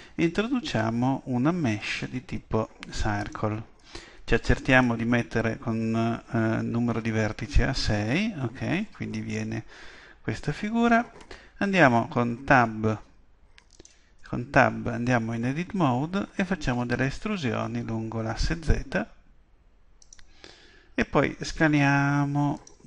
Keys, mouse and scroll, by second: 4.7-6.6 drag, 14.2 Tab, 16.8 e, 20.1-21.9 drag, 21.2 s, 22.7-22.8 drag.